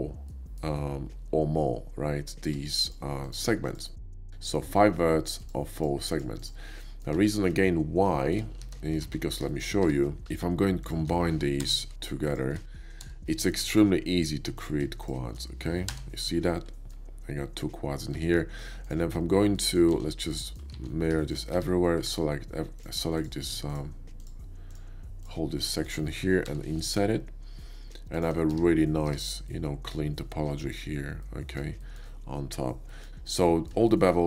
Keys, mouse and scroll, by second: 0.3 middle click, 2.5 Tab, 2.8 click, 3.2 click, 3.6 click, 4.0 click, 5.4 click, 5.8 click, 6.1 click, 6.4 click, 6.8 middle click, 7.5 KP_5, 8.2 shift+middle click, 9.0 alt+x, 9.0 alt+x, 9.5 shift+middle click, 9.8 Tab, 10.8 shift+click, 11.5 j, 12.3 shift+click, 13.0 j, 13.3 middle click, 13.8 KP_5, 14.4 click, 15.0 shift+click, 15.8 j, 16.2-16.9 middle drag, 18.1 Tab, 18.7 click, 19.4 middle click, 20.2 alt+x, 20.3 middle click, 20.7 alt+x, 21.2 shift+middle click, 21.5 Tab, 22.0 a, 22.7 click, 23.1 click, 23.7 ctrl+click, 24.2 ctrl+click, 24.7 ctrl+click, 25.7 shift+middle click, 26.5 i, 28.2 click, 28.2 shift+i, 28.5 Tab, 29.1 Tab, 29.5-29.8 middle drag, 31.1 middle click, 31.8 shift+middle click, 32.7 middle click, 33.2 ctrl+middle click, 33.9 shift+middle click.